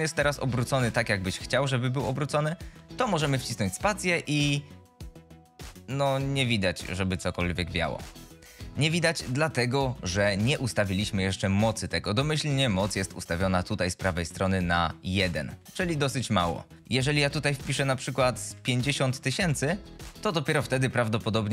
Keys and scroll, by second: 0.9 r, 4.1 space, 9.2 shift+Left, 13.1 F22.